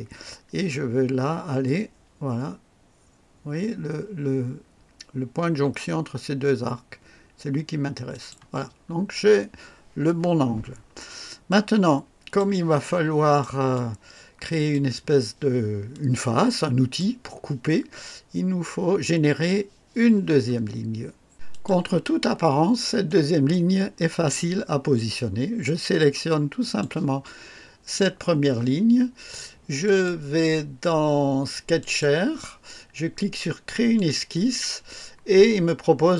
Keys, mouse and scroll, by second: 8.1 click, 8.8 scroll down 1, 10.8 scroll down 1, 11.5 click, 12.9 right click, 13.7 click, 15.9-17.2 drag, 21.5 click, 22.6 scroll up 1, 23.0-23.6 right drag, 26.6 click, 29.8 click, 31.7 click, 33.9 click.